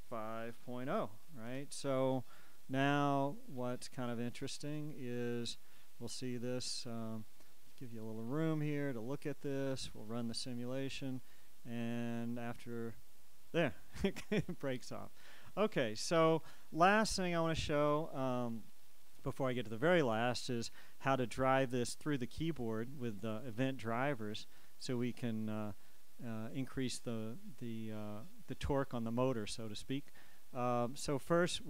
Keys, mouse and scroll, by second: 0.2 5, 0.7 ., 1.0 0, 1.7 Return, 3.2 click, 4.5 click, 6.2 click, 8.5-10.0 scroll down 2, 10.0 shift+scroll down 1, 10.1-14.1 shift+drag, 14.1-23.0 shift+middle drag.